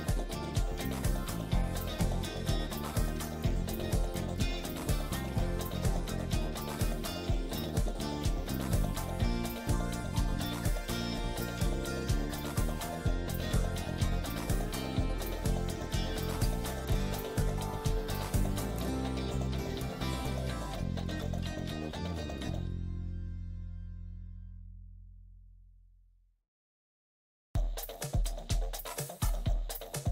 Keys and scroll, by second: 0.8 F3, 3.4 Escape, 6.4 Escape, 6.7 F2, 16.9 space, 18.9 Escape, 25.3 c, 26.1 Escape, 28.9 Escape, 29.6 F2.